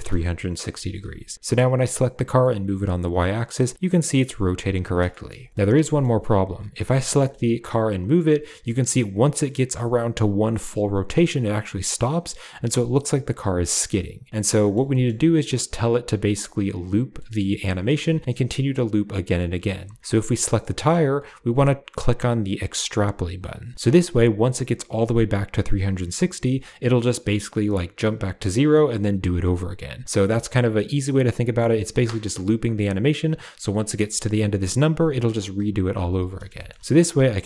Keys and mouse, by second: 1.3 g, 5.0 shift+middle click, 5.5 click, 5.7 shift+drag, 6.9 g, 14.5 middle click, 14.8 shift+middle click, 17.1 shift+middle click, 18.8 click, 22.8 click, 36.4 shift+middle click.